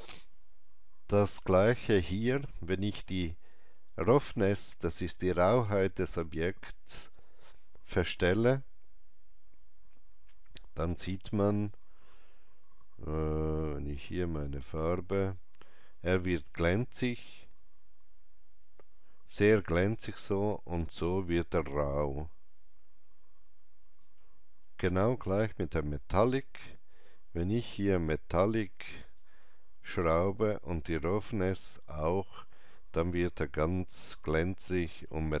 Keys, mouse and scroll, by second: 8.0 ctrl+z, 8.0-17.5 drag, 13.3 shift+right click, 17.5-35.4 drag, 17.5 shift+right click, 34.1 alt+right click.